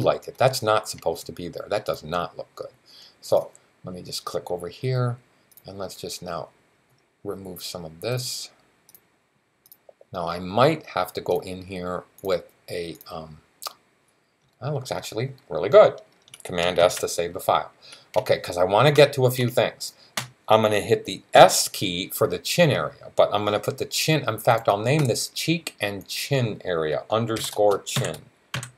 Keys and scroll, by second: 16.6 super+s, 20.0 super+s, 21.2 s, 27.2-28.7 typing.